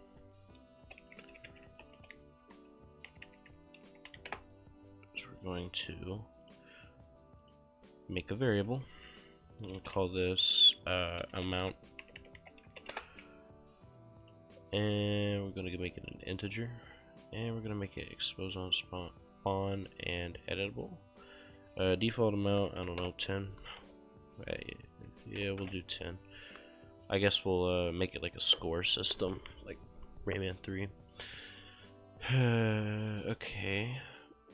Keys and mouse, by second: 0.0-2.1 typing, 3.2-4.7 typing, 5.5 right click, 6.5 click, 9.9-13.3 typing, 14.3 click, 18.2 click, 20.8 click, 22.4-23.9 typing, 25.0 BackSpace, 25.2 1, 25.5 0, 25.7 KP_Enter, 27.1 click, 31.1 click, 31.3 right click, 32.5 right click, 34.0 right click.